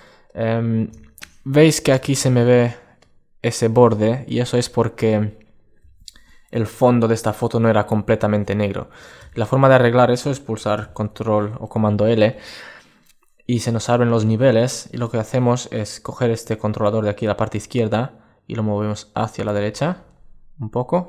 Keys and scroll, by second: 10.5 super+l.